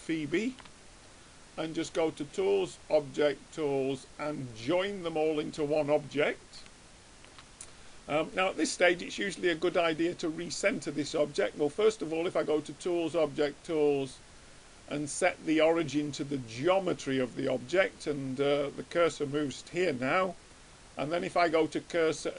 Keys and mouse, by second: 2.8 click, 6.8-8.3 middle drag, 12.5-14.3 drag, 21.3-22.3 drag.